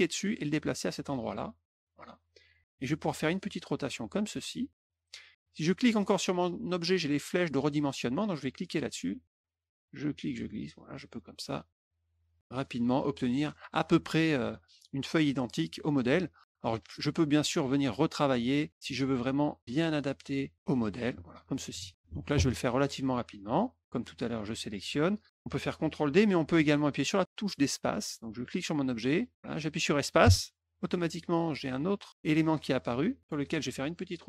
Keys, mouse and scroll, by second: 3.2-4.8 drag, 5.9 click, 8.3-11.0 drag, 11.7 click, 17.9 click, 18.8 middle click, 18.8 scroll up 4, 18.9 middle click, 19.6 click, 20.6 click, 24.7 click, 28.5-32.1 drag, 30.2 space, 33.9-34.2 drag.